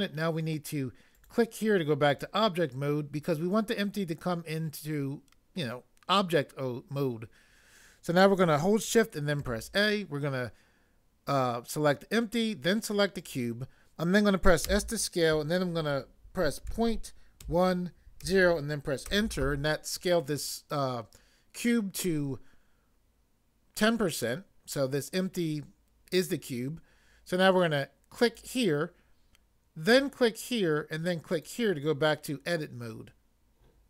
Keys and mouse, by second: 1.2 click, 2.1 click, 9.4 a, 13.2 click, 14.7 s, 16.7 ., 17.4 1, 18.2 0, 19.1 Return, 28.2 click, 29.9 click, 31.3 click.